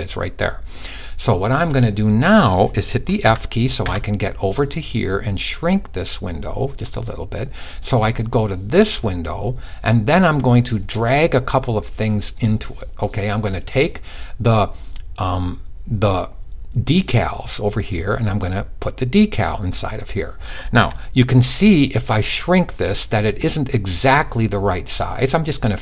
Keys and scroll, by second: 2.8-3.5 typing.